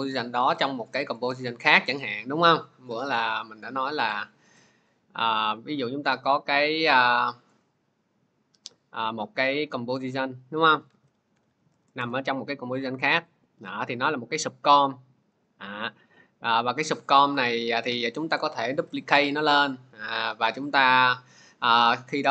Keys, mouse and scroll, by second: 2.0 click, 4.0 click, 5.4 click, 7.5 click, 8.6 click, 10.7-11.8 typing, 13.8 click, 15.3 click, 18.5 ctrl+d.